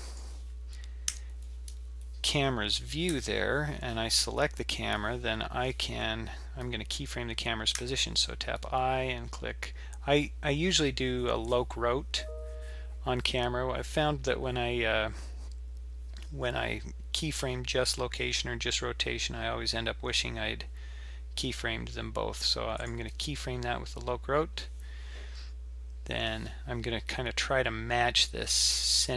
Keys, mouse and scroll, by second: 1.1 n, 3.1 KP_7, 4.3-5.1 scroll down 4, 6.8-7.8 scroll up 2, 7.8-9.2 scroll up 1.